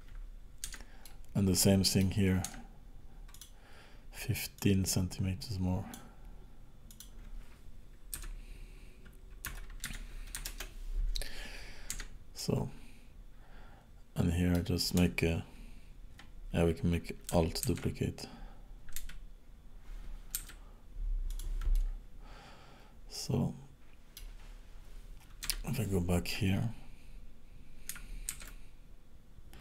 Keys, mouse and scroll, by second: 0.7 Tab, 1.0 middle click, 2.4 Tab, 3.3 click, 4.5 click, 6.9 click, 11.9 Tab, 12.4 middle click, 17.7 alt+d, 21.7 middle click, 25.4 KP_7, 28.3 alt+d.